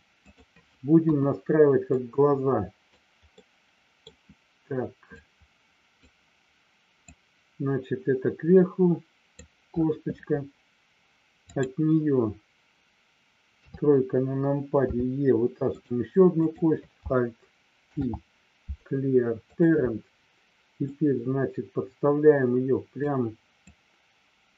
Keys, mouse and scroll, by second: 0.3 click, 1.0 KP_1, 2.0 click, 3.3 middle click, 5.2 click, 7.1-9.3 drag, 11.4 click, 13.4 KP_3, 15.0 e, 15.6 click, 16.3 click, 17.8 alt+p, 20.8-23.0 drag, 23.7-24.5 drag.